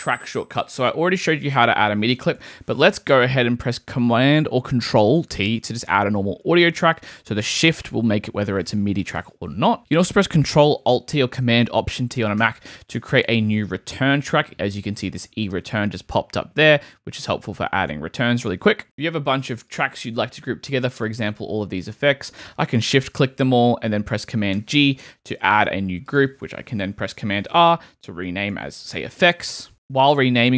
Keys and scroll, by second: 5.7 super+t, 12.4 alt+super+t, 24.5 super+g, 27.2 super+r, 28.2 shift+super+r, 28.3-29.2 typing, 29.7 Tab.